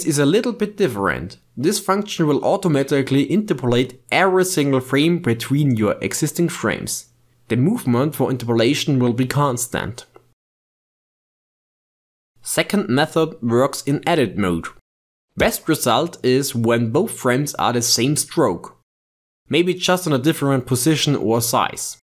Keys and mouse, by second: 1.3-12.1 drag, 12.3-13.5 drag, 13.5 ctrl+Tab, 17.4 a, 19.9 click.